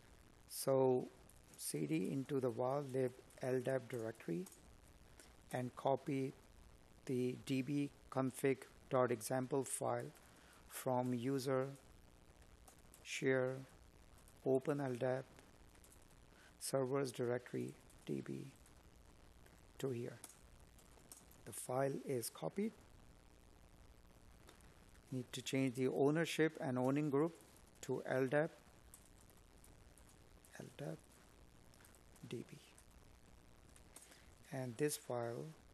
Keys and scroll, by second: 1.5 space, 5.9 Tab, 7.1 Tab, 9.8 Tab, 18.7 space, 22.2 space, 23.9 Tab, 27.4 space, 28.8 Tab.